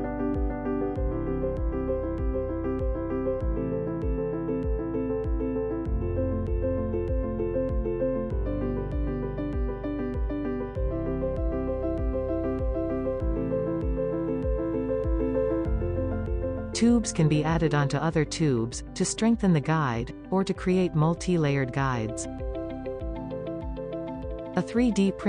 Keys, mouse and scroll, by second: 0.0 middle click, 0.3 scroll up 1, 0.5-1.5 shift+middle drag, 1.5 click, 1.8 g, 2.2 click, 2.3 g, 4.0-6.2 typing, 5.6 middle click, 9.3 f, 10.0-10.4 scroll down 2, 10.4 middle click, 11.0-11.4 drag, 11.4-11.8 scroll down 1, 12.5 Tab, 12.9 scroll up 4, 13.4-15.2 middle drag, 16.6 scroll up 2, 17.9 e, 18.4 e, 19.0 middle click, 19.6 g, 20.1 click, 20.1 g, 21.2 click, 21.4 g, 22.4 middle click, 23.0 scroll down 2, 23.4-25.0 shift+middle drag.